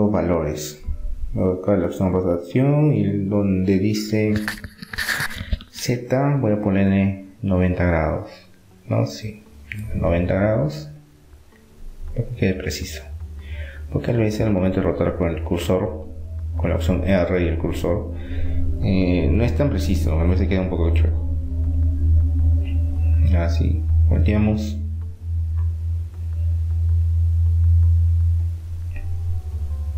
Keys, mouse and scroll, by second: 6.9-8.6 drag, 9.8-11.6 drag, 13.1-14.6 middle drag, 14.8-16.3 drag, 16.3 middle click, 17.7-20.3 middle drag, 20.3-22.1 drag, 22.1-23.8 middle drag, 24.3-26.3 drag, 28.1 middle click, 28.3-29.8 drag.